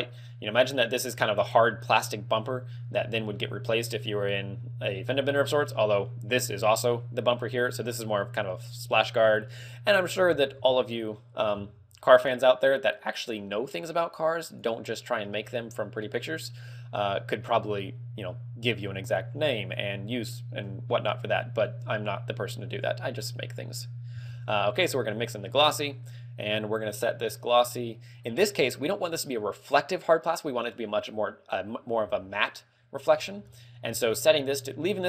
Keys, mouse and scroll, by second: 3.1 g, 4.1 click, 4.9 middle click, 11.2-11.7 scroll up 3, 11.7 shift+a, 15.5 g, 16.8 click, 22.0 click, 23.6 click, 25.9 middle click, 33.3-34.7 scroll up 6, 33.6 middle click.